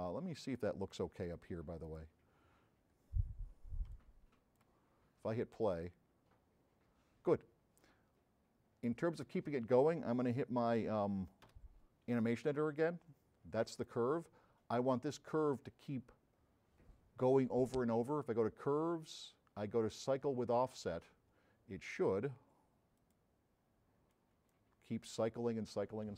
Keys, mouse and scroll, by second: 0.6 middle click, 1.9 click, 3.0 middle click, 3.9 s, 11.5 0, 12.9 middle click, 13.9 click, 18.1 click, 19.0 click, 20.6 click, 23.0 click, 24.2-24.6 drag.